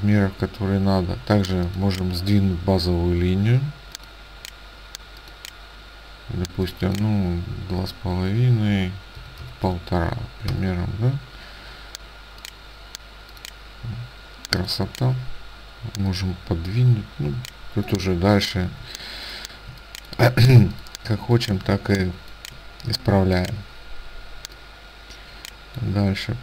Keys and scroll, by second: 9.3 KP_1, 9.7 KP_5, 10.6 Return, 18.8 ctrl+space, 23.0 space.